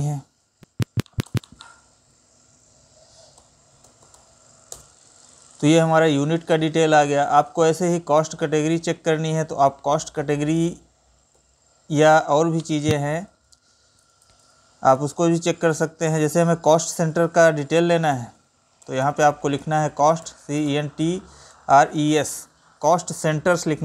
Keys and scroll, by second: 6.7 Up, 7.1 Right, 8.4 Down, 9.7 ctrl+n, 10.1 Up, 10.9 Right.